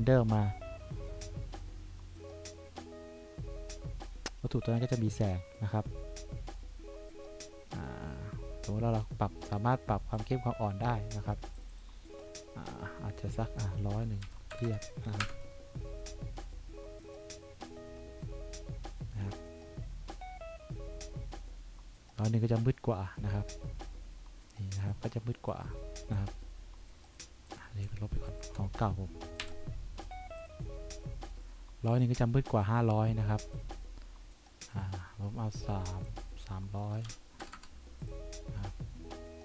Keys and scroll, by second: 14.4 1, 14.7 0, 15.4 Return, 29.6 Delete, 37.3 3, 37.7 0.